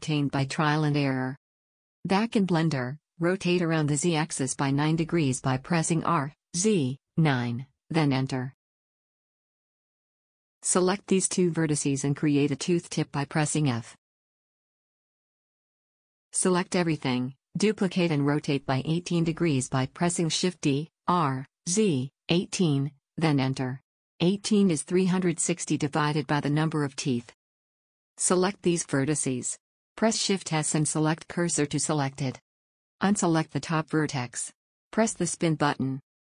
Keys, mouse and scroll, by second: 6.1 r, 9.6-10.7 middle drag, 10.7-11.8 drag, 12.1 f, 12.7 middle click, 16.1 a, 16.3 a, 17.2 shift+d, 27.1-28.3 middle drag, 28.3-31.0 drag, 30.0 shift+s, 31.2-32.9 middle drag, 32.9 click, 34.8-36.3 drag, 35.7 middle click.